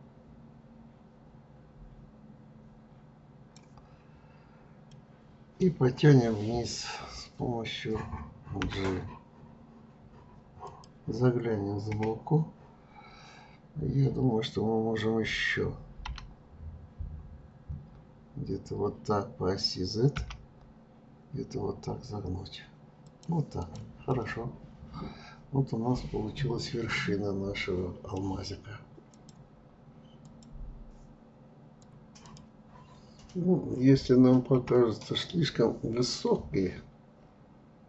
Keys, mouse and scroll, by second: 4.8-7.9 middle drag, 23.6 click, 24.1-27.1 middle drag.